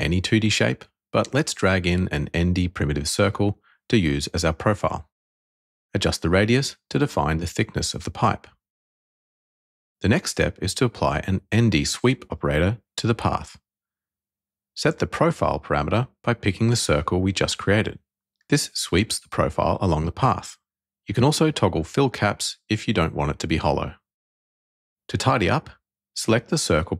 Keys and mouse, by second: 1.7 click, 6.5 click, 8.4-11.2 drag, 14.3 click, 16.8 click, 18.6 click, 20.1 click, 22.7 click, 26.7 click.